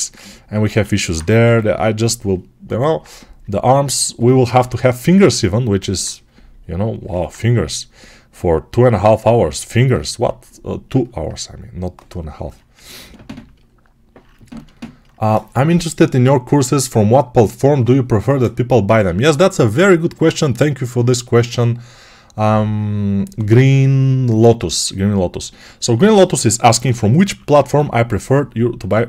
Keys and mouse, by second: 0.5 alt+q, 1.3 g, 10.8-24.7 ctrl+alt+right drag, 26.0 alt+q, 26.6 g, 27.1 ], 27.3 ].